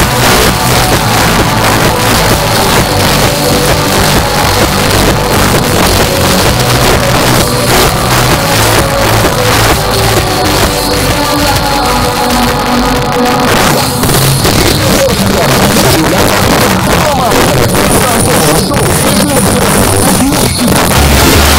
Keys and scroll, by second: 4.4 space.